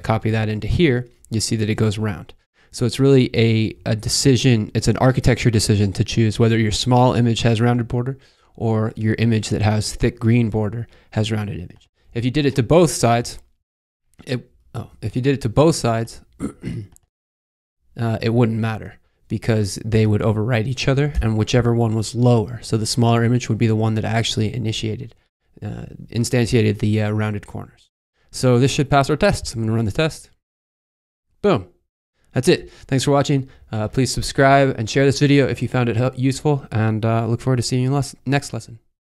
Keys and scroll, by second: 12.2 super+c, 13.2 super+v, 14.6 super+z, 16.4 super+c, 17.2 super+v, 21.1 BackSpace.